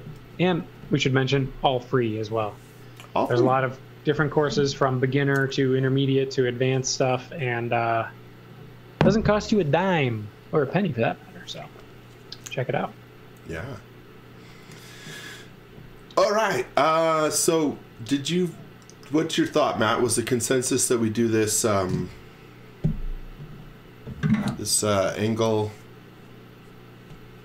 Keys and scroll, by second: 0.0-1.2 typing, 19.9 space.